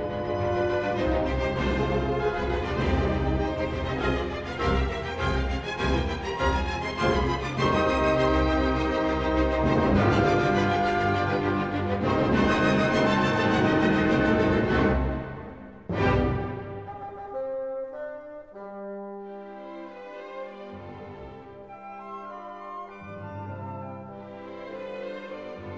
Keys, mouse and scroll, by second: 0.6 click, 1.3 scroll, 1.9 ctrl+scroll, 2.6-2.9 scroll, 5.1 right click, 6.9 click, 7.7-8.6 scroll, 8.0 middle click, 10.0 right click, 11.4 click, 12.5 s, 13.9 click, 15.3 click, 16.0 click, 17.1 Escape, 17.2-18.5 scroll, 18.7 click, 20.0 click, 22.6 click, 23.5 s, 25.0 click.